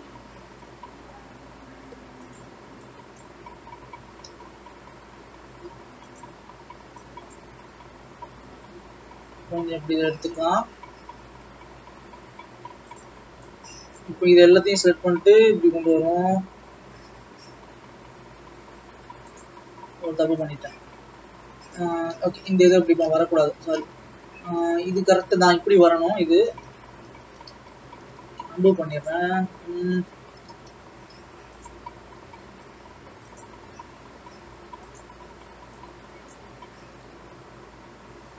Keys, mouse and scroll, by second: 2.4 click, 4.1 g, 6.6-7.2 scroll up 3, 7.4 click, 7.7-8.3 scroll down 2, 8.3 e, 14.1 click, 14.7 e, 19.8-21.8 scroll up 2, 21.8 click, 22.5 ctrl+z, 22.8 ctrl+z, 23.2-23.9 ctrl+z, 26.7 ctrl+z, 27.0 ctrl+z, 27.4 ctrl+z, 27.9 ctrl+z, 29.2 click, 29.9 g, 32.1 e, 35.1 click, 36.4 click.